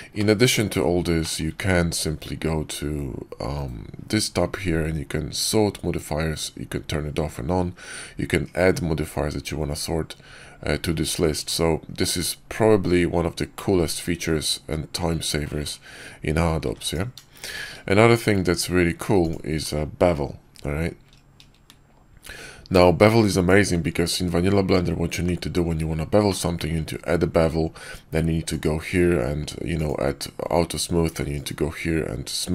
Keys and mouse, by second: 0.1-0.4 middle drag, 1.1 middle click, 1.5 ctrl+`, 13.4-13.8 drag, 16.5 x, 17.4 shift+a, 26.2-26.6 drag, 29.7 click, 31.2-32.3 right drag.